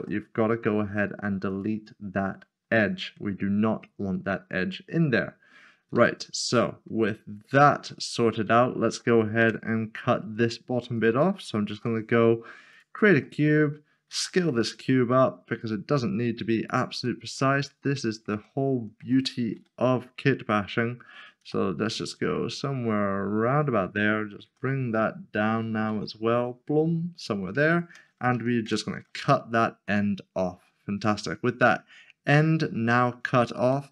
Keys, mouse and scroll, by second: 5.7 click, 5.9 z, 6.7 middle click, 7.0 scroll down 1, 7.9 middle click, 9.4 Tab, 10.9 shift+r, 11.8 a, 13.2 click, 13.4 middle click, 14.1 s, 16.7 click, 17.0 middle click, 18.4 shift+middle click, 19.5 g, 21.4 x, 25.9 z, 27.7 shift+click, 28.6 ctrl+shift+[, 29.9 middle click, 32.9 middle click.